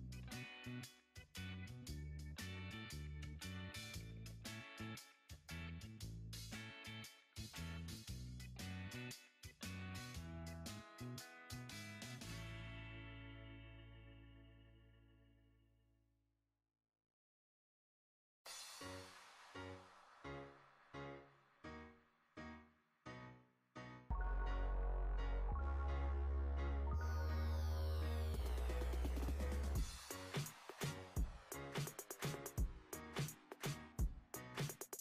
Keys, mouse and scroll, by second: 0.5 click, 1.5 KP_3, 2.7 click, 4.3-4.8 scroll up 5, 5.7-7.4 drag, 8.4 b, 10.4 click, 14.3 scroll down 2, 15.1 click, 17.2 click, 17.9 click, 18.9 shift+click, 19.5 shift+click, 20.3 shift+click, 20.8 shift+click, 21.8 shift+click, 22.7 shift+click, 23.3 shift+click, 24.3 ctrl+b, 26.9 click, 27.4-28.0 scroll up 1, 28.0 click, 28.7 Tab, 30.0 click, 33.5 click.